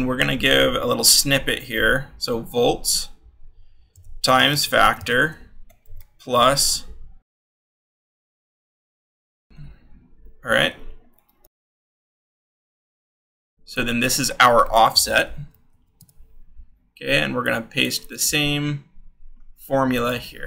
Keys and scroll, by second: 1.6 shift+9, 2.2 v, 3.6-5.6 typing, 8.0-9.8 typing, 10.5 Left, 14.8-17.3 typing, 18.0 ctrl+v, 18.7 t.